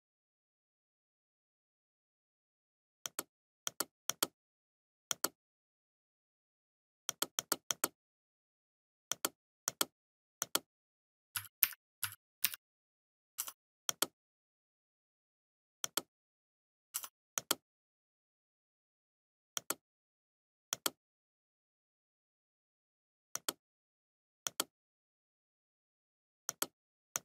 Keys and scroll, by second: 0.0 ctrl+c, 0.2 ctrl+f, 2.0 ctrl+[, 16.5 Left, 17.5 Right, 18.8 Left, 20.9 ctrl+f, 23.6 Delete, 24.6 ctrl+f, 26.6 Return.